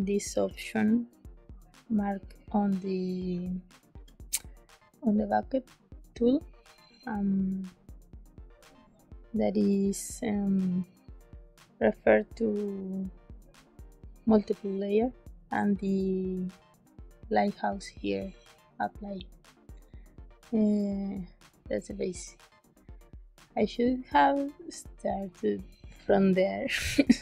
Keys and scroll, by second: 0.4 g, 3.2 g.